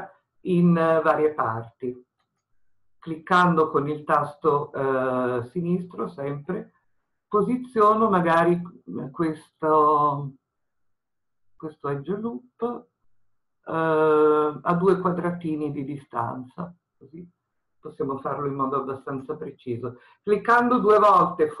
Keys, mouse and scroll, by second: 19.2 click.